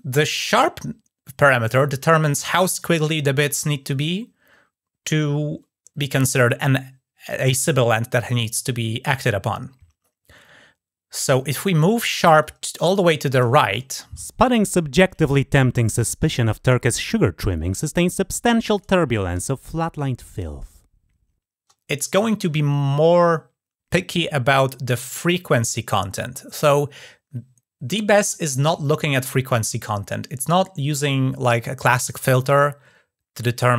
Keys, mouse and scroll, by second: 12.2-13.2 drag.